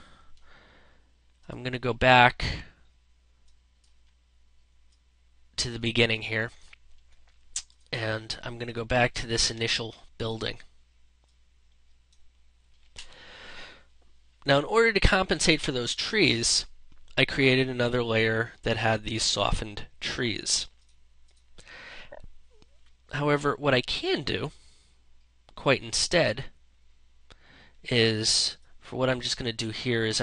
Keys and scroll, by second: 8.7 ctrl+space.